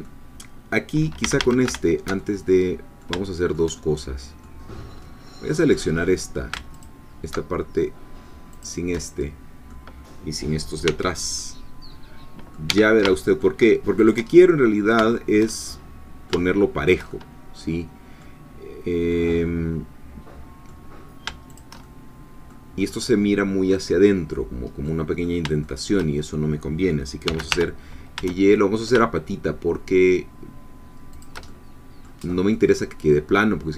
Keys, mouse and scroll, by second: 1.2 a, 2.2-3.7 alt+shift+middle drag, 4.2 middle click, 4.7-5.0 scroll up 2, 5.0-6.5 middle drag, 6.7 alt+shift+click, 8.5 shift+click, 9.0-10.8 shift+middle drag, 10.8 c, 11.4-12.7 middle drag, 12.7 Escape, 13.1 shift+middle click, 14.0 shift+click, 14.3 shift+middle click, 15.9-17.1 middle drag, 17.5-18.6 middle drag, 18.6-19.0 scroll down 1, 19.1-20.8 middle drag, 21.6 shift+click, 21.8 shift+middle click, 22.8-23.6 scroll up 2, 24.8 middle click, 25.6 shift+middle click, 27.2 g, 27.5 y, 31.2 shift+click, 31.5 shift+middle click, 32.2 scroll up 1, 32.3 scroll down 2, 32.5-33.7 middle drag.